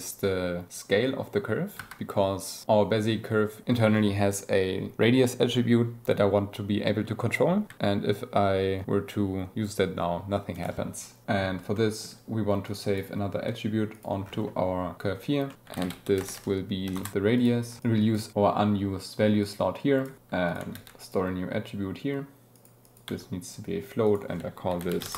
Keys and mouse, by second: 1.7 Tab, 3.0 click, 7.7 alt+s, 10.5 click, 11.6 click, 12.6 click, 13.2 g, 13.9 click, 15.4 click, 15.5 shift+a, 16.3 BackSpace, 17.3 click, 19.4-20.0 drag, 20.4 click, 20.6 shift+d, 20.9 click, 22.5 click, 22.8 click, 24.0-25.1 drag.